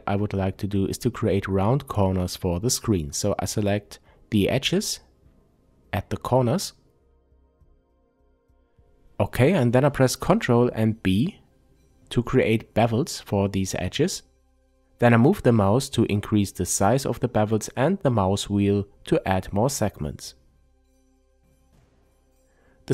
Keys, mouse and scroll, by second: 0.3-0.9 scroll up 2, 0.9 shift+click, 1.1 middle click, 1.9 shift+click, 2.6-4.1 middle drag, 4.1 shift+click, 4.6-9.5 middle drag, 7.6-9.5 scroll down 2, 9.5 click, 11.6 ctrl+b, 17.1 click, 17.5-22.9 middle drag.